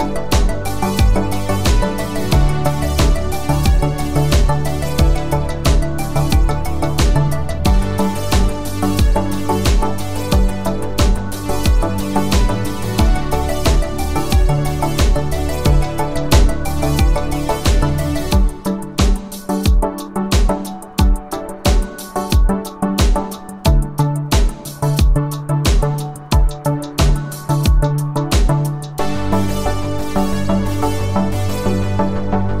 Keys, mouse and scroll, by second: 1.4 click, 4.4 space, 4.6 click, 4.8 space, 6.7 click, 17.4 click, 20.6 click, 23.2 space, 23.5 click, 23.6 space, 24.7 click, 29.6 space, 29.8 click, 30.7 click.